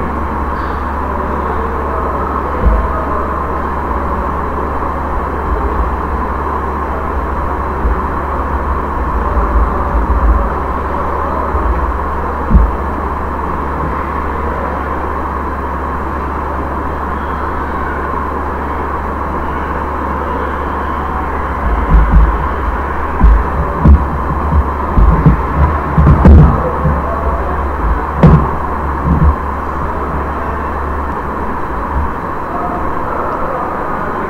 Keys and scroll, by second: 0.4 ctrl+a, 4.8-11.5 typing, 31.1 space.